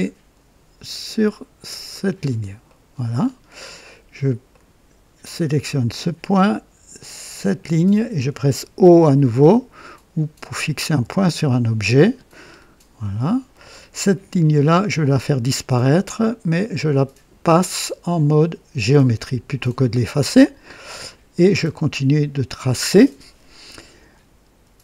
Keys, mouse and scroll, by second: 1.8 click, 2.6 right click, 3.2 scroll up 1, 3.6 right click, 4.5 right click, 5.7 click, 7.3 click, 10.8 o, 12.4-12.7 scroll down 2, 13.0-13.6 right drag, 14.9 click, 18.8 click, 20.6-21.2 right drag.